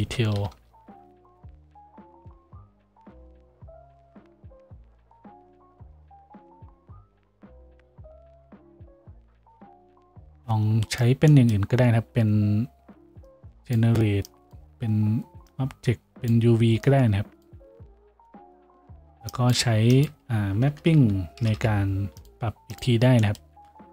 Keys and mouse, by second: 19.8 shift+a, 21.6 p.